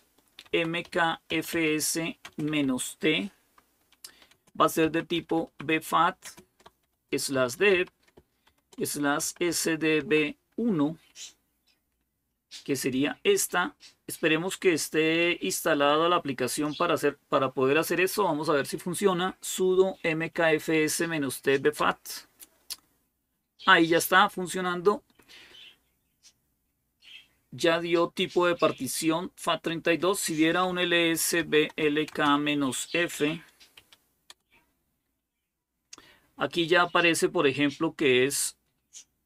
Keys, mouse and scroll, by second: 0.0-2.3 typing, 3.6-9.8 typing, 10.9 typing, 16.2 click, 21.6 Return, 30.0-34.1 typing.